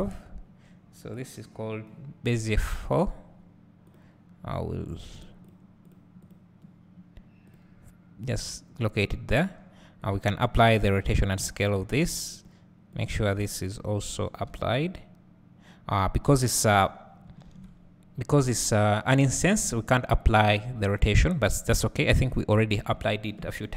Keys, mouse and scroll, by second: 2.9 click, 5.5 click, 8.4-10.1 drag, 11.3-12.5 drag, 13.0 click.